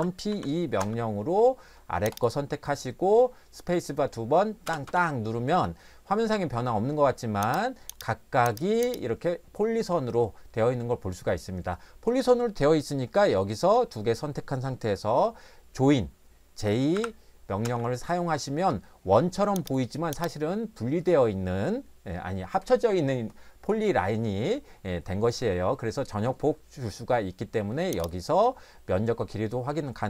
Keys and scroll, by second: 0.3 e, 0.8 space, 4.7 space, 4.9 space, 16.9 j, 17.6 space.